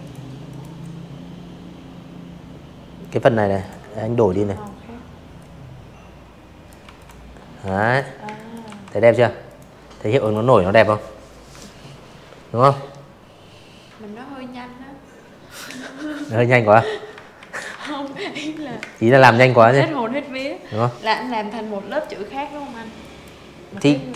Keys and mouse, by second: 0.5 click, 1.4 click, 2.3-3.6 drag, 3.7 v, 3.9 click, 4.5 z, 4.7 click, 5.1 space, 5.2 click, 5.6 v, 6.4 click, 7.1 click, 14.3 ctrl+z, 14.7 ctrl+z, 15.7 space, 15.8 click, 17.9 click, 18.7 click, 19.9 click, 20.8 ctrl+z, 21.4 click, 22.9 click, 23.1 End, 24.0 Delete.